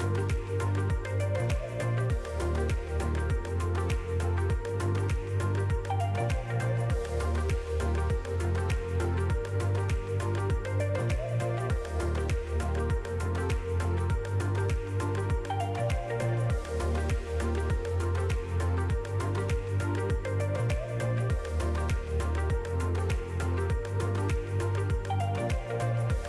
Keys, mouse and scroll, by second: 3.9 shift+click, 9.5 click, 11.7 middle click, 13.0 click, 14.3 middle click, 15.5 alt+a, 16.8 l, 17.2 middle click, 18.1 s, 19.4 click, 21.2 click, 21.7 middle click, 23.2 middle click, 23.9 s, 24.7 click, 26.0 alt+a, 26.1 middle click.